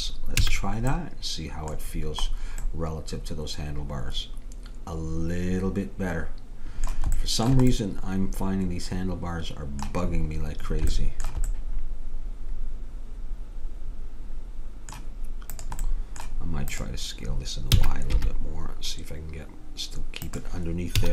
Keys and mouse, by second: 0.4 a, 1.2-4.5 middle drag, 5.4 middle click, 7.2-8.7 middle drag, 10.2-13.3 middle drag, 15.6-18.5 drag, 17.8 s, 21.0 a.